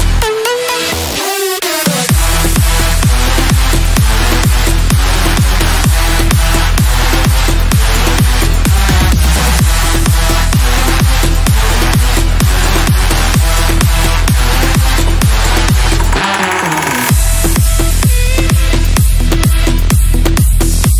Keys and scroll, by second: 10.8 F3, 14.9 Delete.